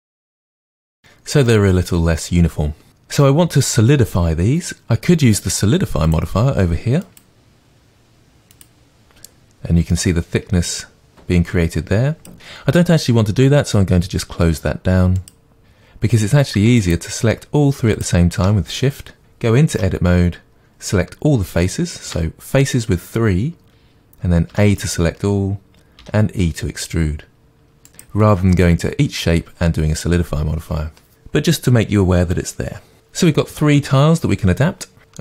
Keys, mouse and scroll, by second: 0.1 click, 0.4 click, 0.6 g, 0.9 click, 1.1-1.5 scroll down 1, 1.5-6.1 middle drag, 6.1-15.6 drag, 16.8 shift+click, 18.0-19.2 shift+drag, 19.7 Tab, 22.1-26.0 middle drag, 22.1 3, 24.5 a, 26.0 e, 28.0 click, 35.0-35.2 shift+middle drag.